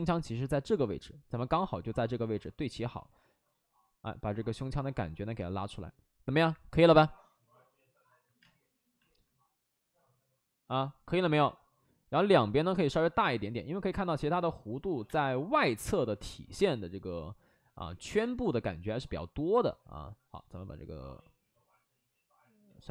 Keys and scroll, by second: 8.3 space, 13.1 ctrl+z, 14.3 ctrl+z, 15.0 space, 15.7 space, 18.1 space, 22.6 ctrl+z.